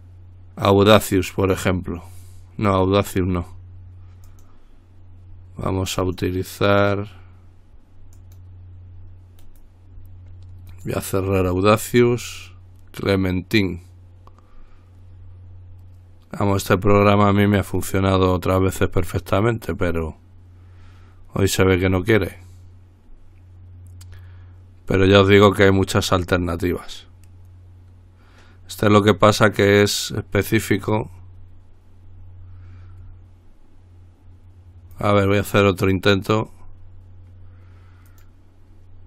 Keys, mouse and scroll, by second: 1.4 click, 4.5 click, 6.2 click, 8.4 click, 9.6 right click, 10.9 click, 12.6 click, 35.2 click, 38.3 click.